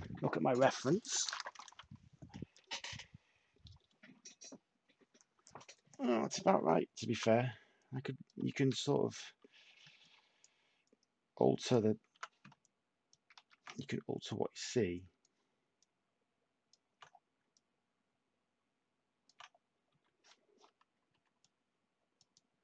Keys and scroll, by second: 7.1 t, 8.5 ctrl+z, 9.8 ctrl+z, 12.1 t, 21.0 /.